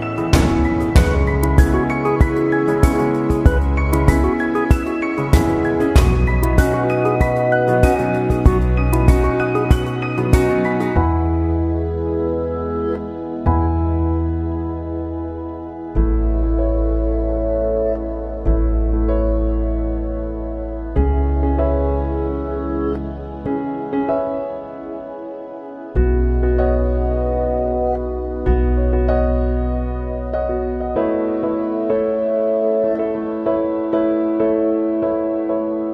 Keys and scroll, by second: 10.5 ctrl+[, 14.3 ctrl+c, 14.5 ctrl+v, 25.1 ctrl+=, 33.3 Right, 34.4 Down, 34.7 Left.